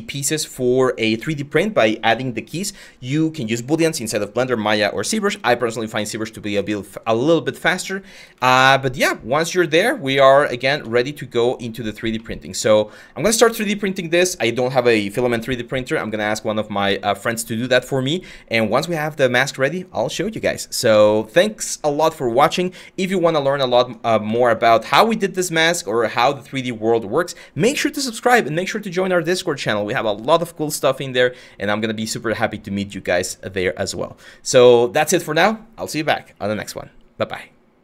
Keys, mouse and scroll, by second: 8.1 alt+Tab, 10.3 alt+Tab.